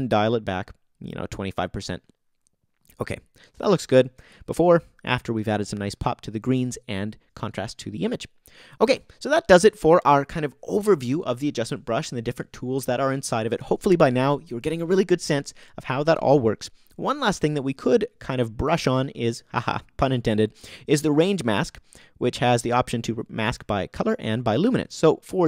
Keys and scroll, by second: 4.1 BackSpace, 4.7 super+BackSpace.